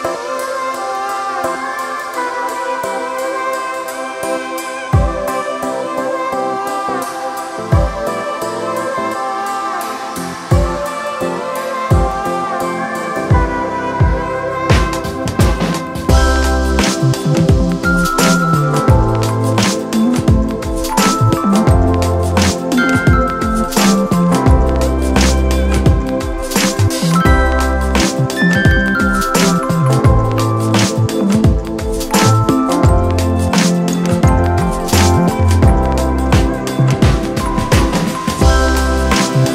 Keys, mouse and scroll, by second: 4.4 [.